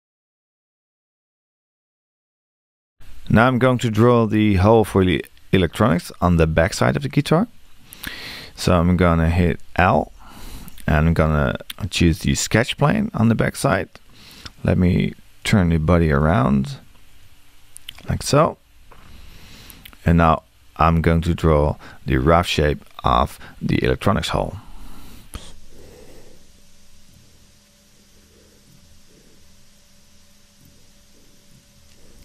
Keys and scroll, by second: 9.9 l.